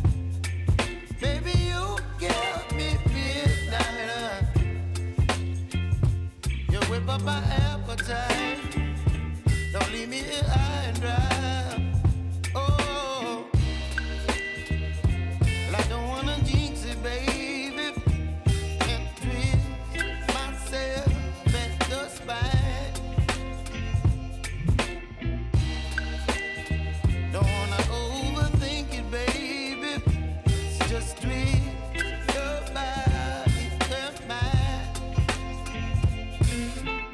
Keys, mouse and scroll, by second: 0.4 ctrl+d, 1.1 r, 2.0 click, 3.4 Return, 3.8 click, 4.2 space, 5.5 [, 6.0 space, 10.3 space, 10.9 click, 11.3 u, 14.0-16.2 drag, 18.5 click, 20.5-22.6 typing, 23.9 click, 26.0 ctrl+alt+Home, 28.2-30.3 drag, 30.7 -, 31.7 Return, 32.8-36.4 drag.